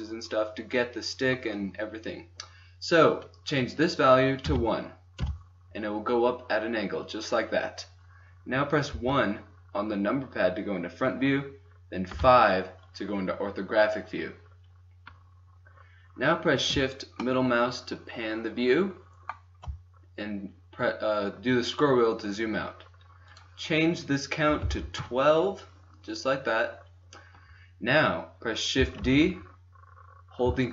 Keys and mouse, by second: 3.6-5.7 drag, 8.8 KP_1, 12.0 KP_5, 17.4-18.4 middle drag, 22.8 middle click, 23.3-25.0 drag, 25.0-26.0 middle drag, 28.8 shift+d.